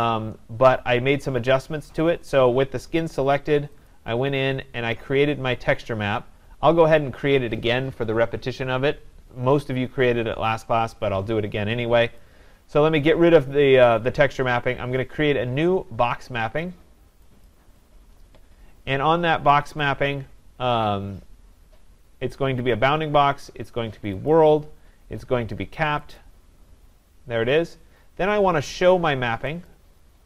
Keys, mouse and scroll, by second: 3.9 click, 5.7-9.0 drag, 12.2-17.2 drag, 17.5 click, 22.9 click, 24.3 click, 26.1 click, 29.7 click.